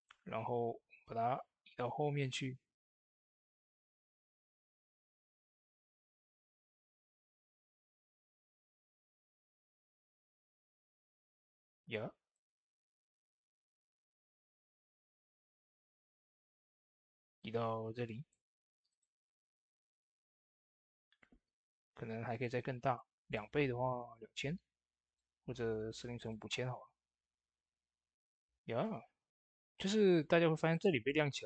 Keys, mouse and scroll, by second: 5.7 typing, 14.1 typing, 15.4 middle click, 16.2-17.2 scroll up 2, 17.2-18.4 drag, 20.2 typing, 28.6 click, 28.7-31.4 drag.